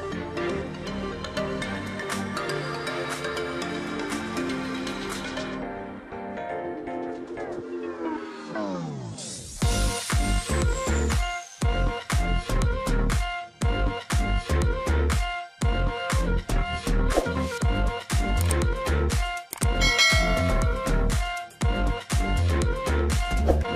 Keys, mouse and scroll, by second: 0.2 Delete, 2.2-2.6 scroll up 3, 4.1-4.5 scroll down 2, 4.5 scroll up 2, 4.8 space, 5.1-5.5 scroll up 2, 5.5 space, 9.4 alt+scroll up 1, 9.8 alt+click, 10.1 alt+scroll down 1, 10.3 space, 11.1 alt+scroll down 1, 11.9 space, 12.8 alt+click, 13.7 ctrl+z, 15.8 alt+scroll down 1, 16.8 ctrl+click, 18.3 ctrl+click, 19.0 alt+click, 19.8 ctrl+click, 21.2 alt+scroll down 1, 21.4 space, 21.7-22.1 alt+scroll up 1, 22.1 alt+click, 22.7 alt+scroll down 1, 22.9 space, 23.6 ctrl+click.